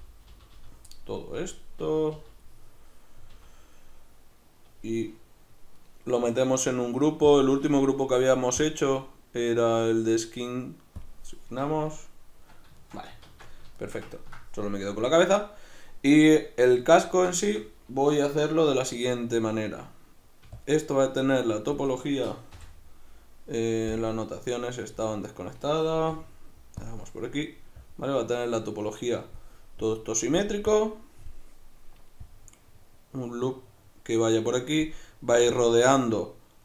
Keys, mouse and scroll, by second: 0.9-7.3 middle drag, 1.4 l, 3.3 l, 7.3-12.5 drag, 11.7 Tab, 12.5-20.6 middle drag, 13.3 alt+q, 20.4 d, 20.6-24.9 drag, 21.8 d, 24.9 n, 26.8-36.6 drag.